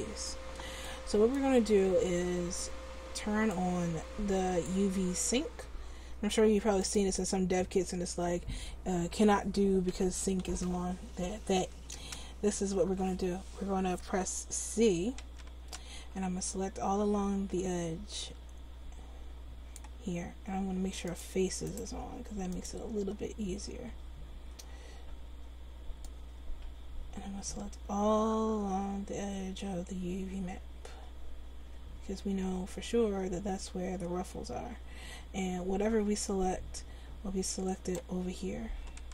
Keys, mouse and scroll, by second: 10.0 a, 10.4 l, 15.2 c, 22.6-23.9 drag, 23.9 c.